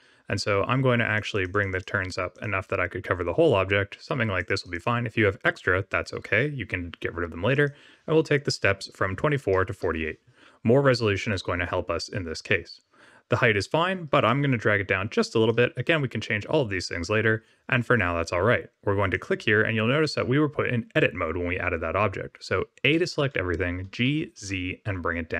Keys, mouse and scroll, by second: 1.1 click, 1.3 click, 1.5 click, 1.7 click, 2.3-4.7 click, 4.3 click, 4.5 click, 7.5 click, 14.2 shift+click, 19.1 click, 22.8 a, 23.8 g.